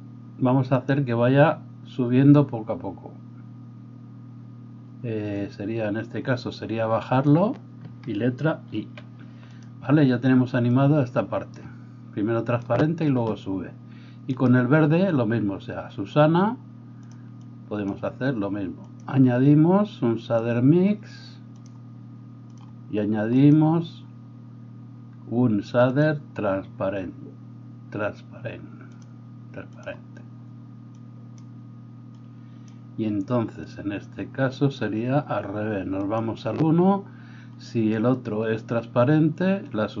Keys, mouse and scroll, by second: 0.7-9.7 drag, 8.7 i, 9.7-10.7 middle drag, 10.7-17.2 drag, 14.4-17.5 middle drag, 14.4-17.2 right drag, 17.5-22.6 drag, 22.6 middle click, 23.4-29.9 drag, 29.9-30.9 middle drag, 30.9-40.0 drag.